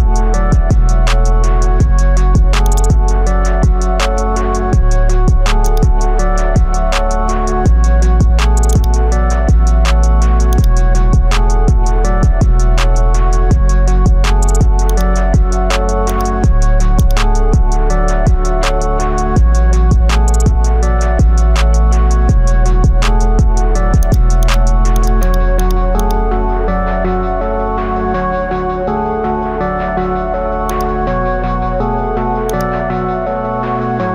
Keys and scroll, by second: 7.1 ctrl+z, 12.1 ctrl+z.